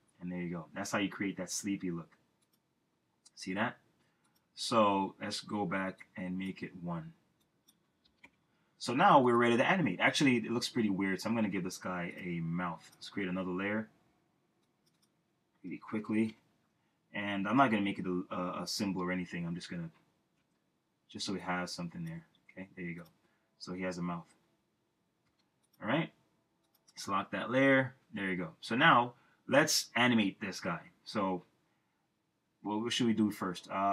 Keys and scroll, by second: 8.0 1, 8.2 Return, 15.6-16.3 typing, 18.8 o, 25.2 v.